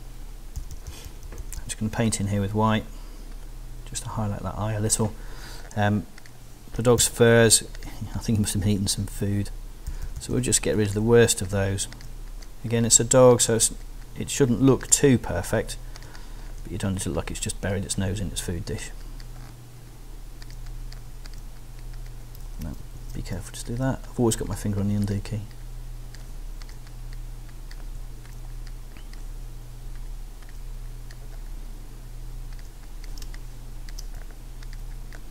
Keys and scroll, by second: 0.6 [, 7.0 s, 9.9 alt+[, 10.7 alt+[, 22.4 super+z, 33.2 alt+space, 33.7 space.